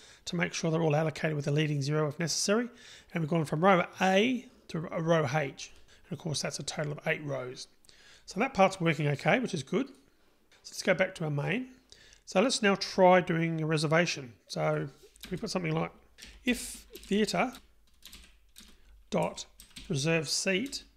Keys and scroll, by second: 18.7 Return.